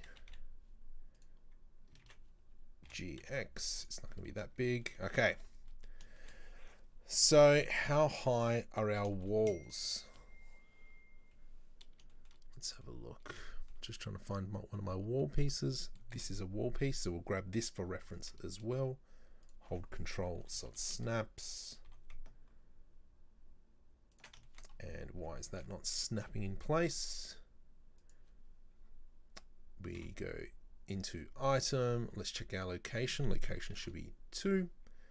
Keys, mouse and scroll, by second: 2.1 ctrl+z, 2.9 g, 4.3-5.5 middle drag, 5.5 scroll up 2, 5.7-6.9 middle drag, 6.9-7.3 scroll down 2, 7.3-8.6 middle drag, 8.6 right click, 9.2-9.7 shift+middle drag, 9.7 right click, 10.1 right click, 12.2-12.6 shift+middle drag, 12.6 right drag, 12.9-14.3 middle drag, 14.3 right click, 14.8-16.2 middle drag, 16.2 KP_7, 18.0 g, 20.4 r, 21.9 g, 24.5 shift+middle click, 24.8-25.4 scroll up 6, 25.4-26.6 shift+middle drag, 26.6-26.9 scroll up 2, 26.9 g, 30.0 n, 31.1 click, 32.9-35.1 drag.